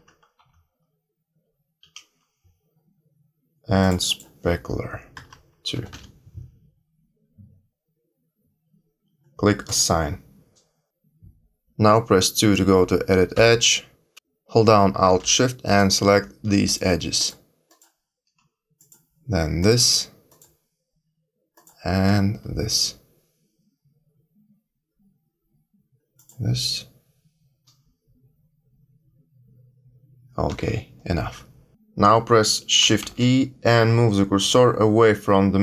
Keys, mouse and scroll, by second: 3.7 click, 9.6 click, 10.9 click, 13.3 2, 15.6 alt+shift+click, 21.5 alt+shift+click, 26.1 alt+shift+click, 32.9 shift+e.